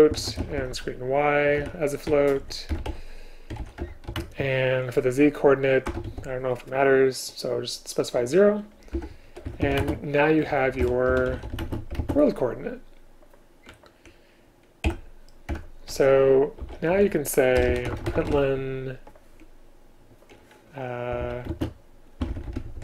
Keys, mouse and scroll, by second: 2.8 BackSpace, 3.9 Return, 4.3 space, 9.0 Home, 9.9-11.7 typing, 14.9 End, 15.5 Return, 17.6 BackSpace, 17.7 BackSpace, 21.5 space.